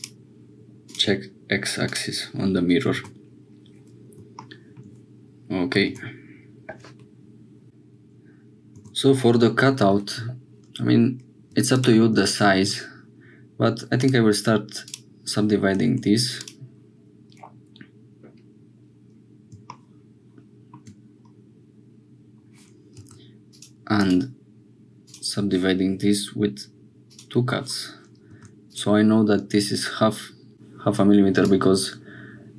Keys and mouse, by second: 0.9 click, 1.8 click, 3.0 Tab, 5.9 Tab, 7.6 ctrl+s, 8.8 Tab, 11.5 2, 14.6-15.9 right drag, 15.9 1, 23.0 2, 24.5-26.0 right drag, 27.1 click, 28.3 2, 28.7 click, 31.4-32.5 drag.